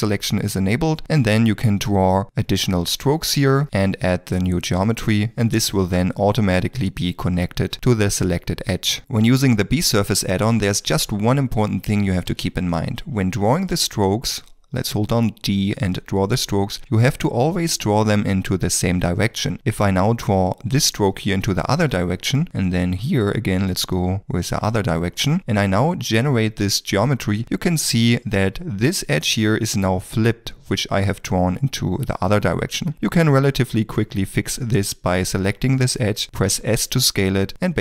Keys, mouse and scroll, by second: 1.1 d, 1.4 click, 2.5 click, 10.7 middle click, 12.3 alt+a, 12.9 middle click, 13.3 ctrl+middle click, 14.7 click, 16.6 d, 21.9 d, 23.9 click, 24.8 d, 25.1 shift+middle click, 33.8 shift+click, 36.5 s.